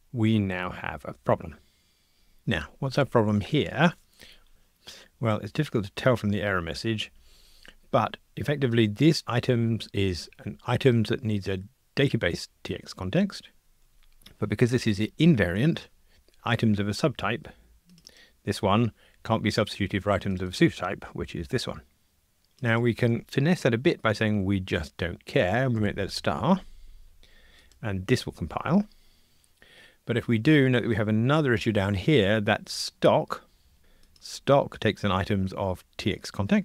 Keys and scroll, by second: 9.2 super+b, 30.5 F2, 34.2 super+b.